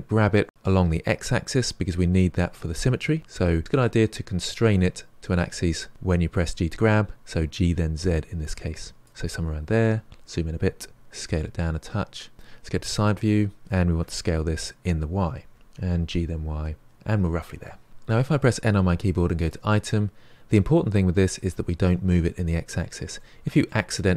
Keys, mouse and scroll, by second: 9.9-10.9 scroll up 5, 10.9 s, 12.9 KP_3, 14.0 s, 15.5 g, 17.9 n, 19.4-22.4 drag, 23.1 middle click, 23.9-24.1 scroll down 1.